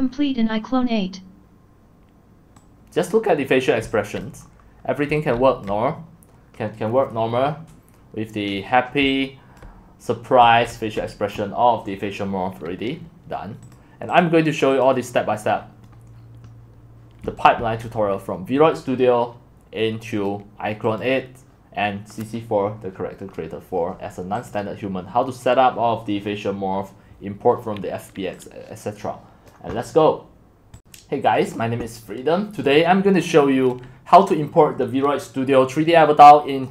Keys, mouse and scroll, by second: 0.1-3.1 scroll down 4, 3.1 click, 3.5 middle click, 4.2 click, 4.4 middle click, 4.8-5.8 typing, 5.7-9.0 drag, 9.0-10.4 typing, 9.6 click, 11.0-15.5 drag, 15.5-17.2 middle drag, 15.5-16.4 scroll, 17.2-17.6 typing, 17.9-23.1 drag, 24.5 click, 27.8-36.7 drag.